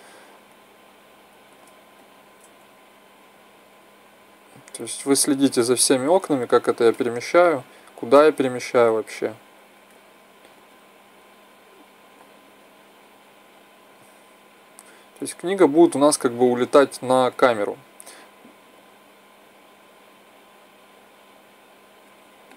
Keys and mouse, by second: 0.5-3.2 drag, 3.3 middle click, 3.7-4.9 drag, 8.6-10.3 drag, 10.7 click, 11.8-12.4 drag, 13.1-15.2 drag, 16.0-18.1 middle drag, 18.1-19.9 drag, 20.8-22.1 drag, 22.4-22.5 middle drag.